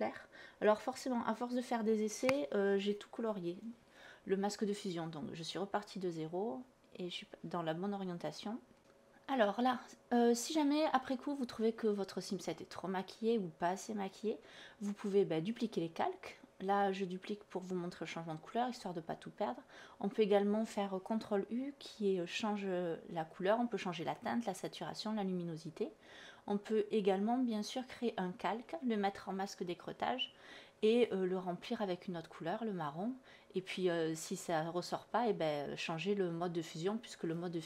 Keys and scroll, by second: 2.2 alt+BackSpace, 17.8 ctrl+u, 30.8 alt+Delete, 33.8 alt+Delete.